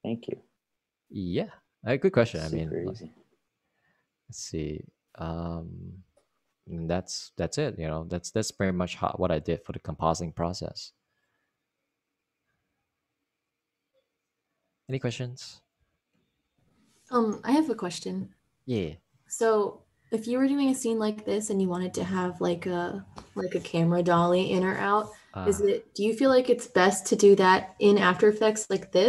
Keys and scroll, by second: 21.4 super+s.